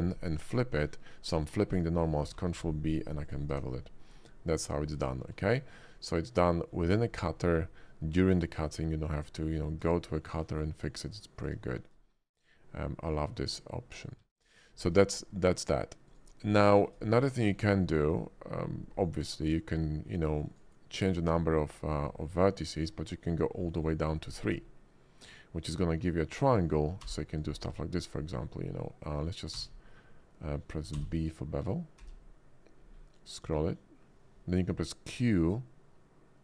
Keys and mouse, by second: 2.3 ctrl+b, 3.5 Tab, 4.1 click, 5.2 shift+2, 5.9-6.7 drag, 8.7 shift+middle click, 10.0-10.4 shift+middle drag, 11.1 middle click, 11.7 shift+middle drag, 12.2-13.4 middle drag, 14.0 click, 14.2 x, 14.8 shift+a, 16.7 shift+click, 17.2 middle click, 17.8 shift+click, 19.6-20.6 drag, 27.0 b, 29.5 q, 30.9 b, 32.0 b.